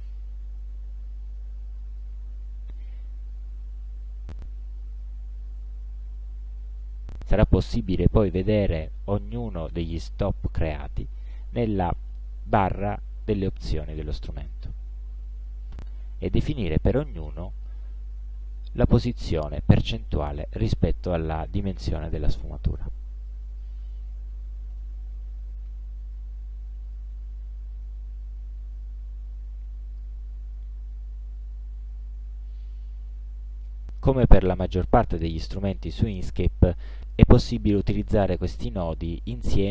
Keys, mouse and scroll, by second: 7.2 click, 12.5 click, 13.3 click, 23.4 click, 24.3 8, 24.4 KP_0, 24.8 Return, 27.2-30.3 drag.